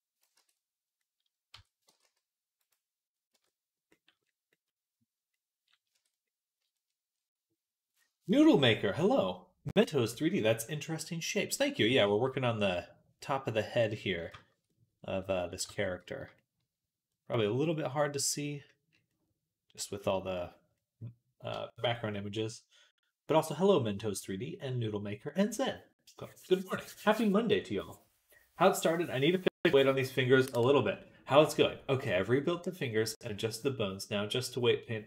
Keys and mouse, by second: 0.2 Tab, 0.5 middle click, 0.9 middle click, 1.4 Tab, 1.7 g, 2.6 right click, 3.2 Tab, 3.2-6.7 drag, 5.8 Tab, 6.7-10.7 middle drag, 10.7-11.9 right drag, 11.9-14.1 shift+middle drag, 14.1 shift+right click, 14.2 shift+middle click, 14.3 shift+right click, 14.4 middle click, 14.5-15.5 middle drag, 15.5 Tab, 15.5-18.5 right drag, 18.5-35.0 middle drag.